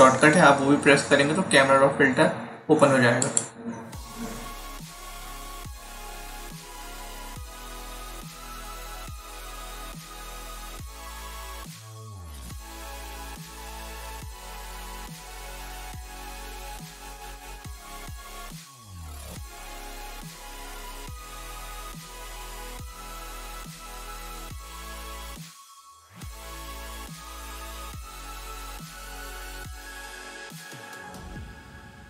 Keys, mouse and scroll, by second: 3.1 click, 7.6 click, 12.6 click, 16.1 click, 17.7 click, 19.8 click, 22.4 click, 23.8 click, 26.0 click.